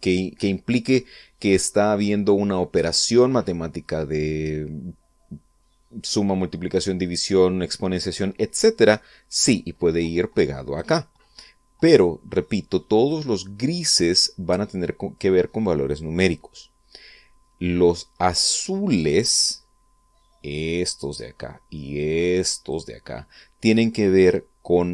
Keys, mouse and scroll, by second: 10.3-11.6 drag, 14.0-14.8 drag, 21.1-21.8 drag, 22.6-23.5 drag.